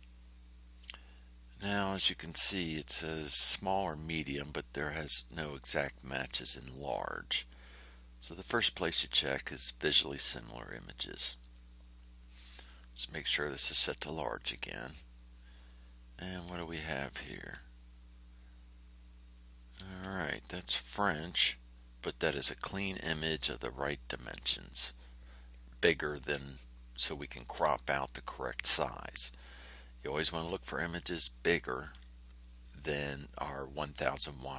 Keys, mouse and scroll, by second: 6.9-7.3 scroll down 2, 9.9 click, 12.5 click, 13.5 click.